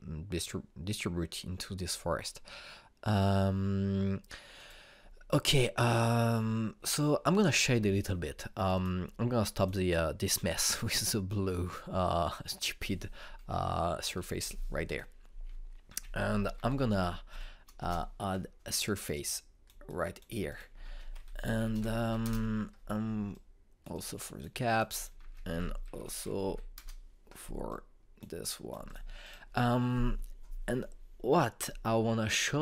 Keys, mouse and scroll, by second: 5.2 click, 9.3 click, 14.8 Delete, 15.5 click, 16.5 ctrl+space, 16.6-17.8 typing, 17.9 Up, 18.4 Return, 19.4-21.1 drag, 21.5 ctrl+space, 21.6-22.7 typing, 22.9 Return, 23.9-25.4 drag, 25.8 ctrl+space, 25.9-27.1 typing, 27.4 Return, 28.3 click.